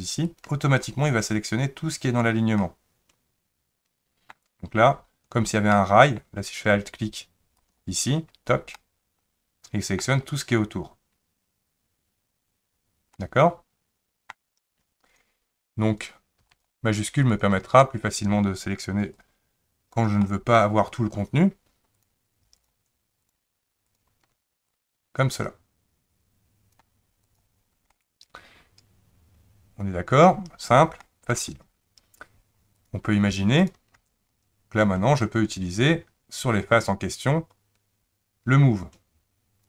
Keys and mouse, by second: 0.4 alt+click, 2.6-4.3 middle drag, 5.7 middle click, 7.6 alt+click, 8.7-10.0 middle drag, 13.2-14.3 middle drag, 15.1 click, 16.6-17.6 shift+drag, 19.3 click, 20.2 middle click, 22.6 shift+click, 23.2 shift+click, 23.9 shift+click, 24.7-26.8 drag, 27.3 click, 27.9-30.3 middle drag, 31.0 shift+middle click, 32.7 click, 35.3 click, 36.8-39.6 drag.